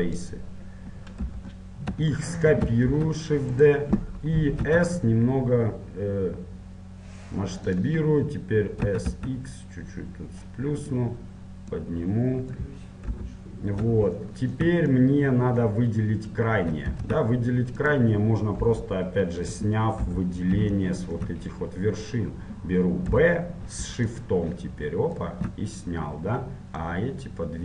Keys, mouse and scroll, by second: 0.3 b, 1.5 KP_1, 2.4 middle click, 3.0 shift+d, 4.2-6.1 middle drag, 4.9 s, 9.0 s, 11.9-14.4 drag, 13.3 KP_7, 14.4-18.1 middle drag, 18.1 ctrl+Tab, 18.7 KP_1, 20.3 KP_7, 21.0 middle click, 25.4 b, 27.1-27.6 drag.